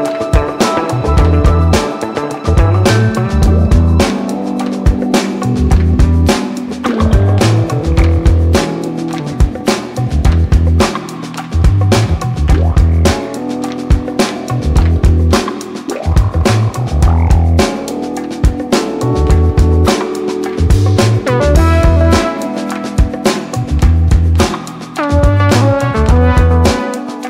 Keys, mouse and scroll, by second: 0.8 click, 3.3-11.2 drag, 13.7 click, 17.6-27.2 drag.